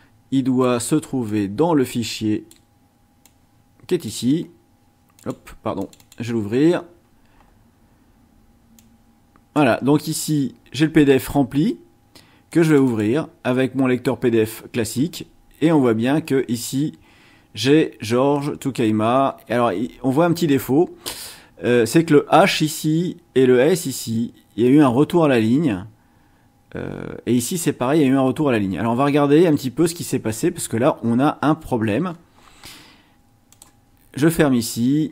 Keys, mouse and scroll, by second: 1.3-2.7 drag, 3.2-4.2 drag, 5.1 click, 5.8 click, 8.7-9.7 drag, 12.5 click, 29.4-31.7 scroll down 6, 32.1-32.6 scroll up 2, 33.5 click.